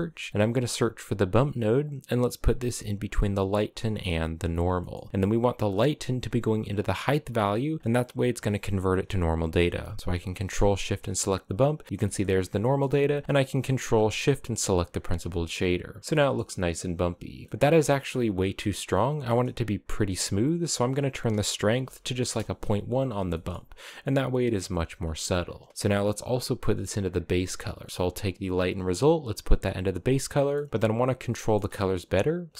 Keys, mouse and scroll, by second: 4.1 click, 4.4-5.1 scroll up 1, 5.1 click, 6.3 click, 9.8 ctrl+shift+click, 10.5 shift+middle click, 11.0-11.6 scroll up 3, 11.6-12.3 scroll down 5, 11.9 shift+middle drag, 12.3-13.4 middle drag, 13.4 ctrl+shift+click, 13.9 click, 15.0 shift+middle click, 15.2-16.2 scroll up 2, 16.2-20.1 shift+middle drag, 20.1-22.8 drag, 22.8 scroll down 1, 23.0-25.2 shift+middle drag, 25.2 scroll down 1, 25.4-26.6 middle drag, 26.6-26.9 scroll up 2, 26.9 middle click, 27.4 click, 28.4 click, 30.2-32.2 shift+middle drag, 32.2 shift+a.